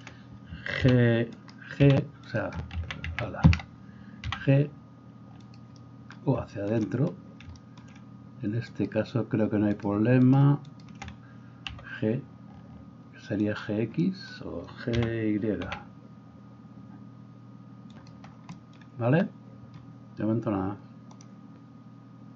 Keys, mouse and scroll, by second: 0.0-1.4 shift+middle drag, 0.8 h, 1.4 right click, 1.6-8.7 middle drag, 1.8 g, 3.1 ctrl+z, 4.2 g, 8.7 right click, 9.5 shift+middle click, 9.7-10.9 shift+right drag, 10.9-21.2 shift+middle drag, 11.7 g, 15.0 g.